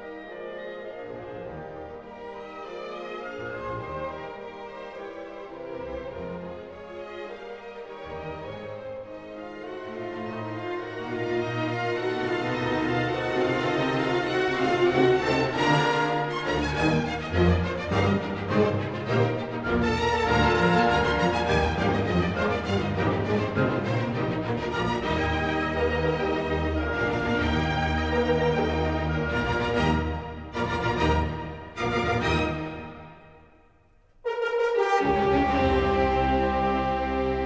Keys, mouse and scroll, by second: 0.7-1.8 middle drag, 2.3-3.6 right drag, 3.6-4.8 drag, 5.4-6.0 scroll, 7.5 click, 9.1-9.5 scroll, 11.4 click, 12.9 click, 13.9 click, 14.8-16.0 drag, 19.6-20.7 drag, 21.1-22.1 drag, 22.4-23.5 drag, 24.4 typing, 25.1 Return, 26.4 scroll up 3, 27.3 scroll up 1, 29.1 click, 30.9-31.5 scroll, 32.0 scroll, 32.6 ctrl+middle click, 32.7 middle click, 32.8 middle click, 32.9 middle click, 34.8 middle click, 34.8 middle click, 35.5 middle click, 35.9 scroll.